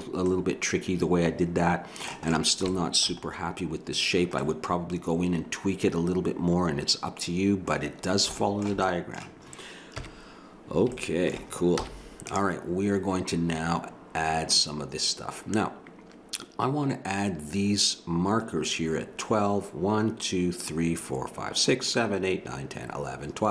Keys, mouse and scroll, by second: 0.3 middle click, 3.3-6.2 middle drag, 7.8-8.9 middle drag, 10.0 KP_1, 11.8 z.